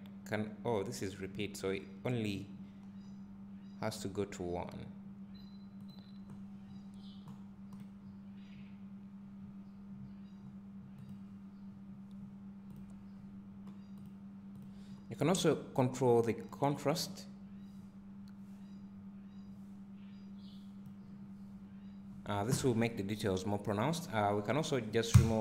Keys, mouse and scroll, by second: 18.0-25.4 drag.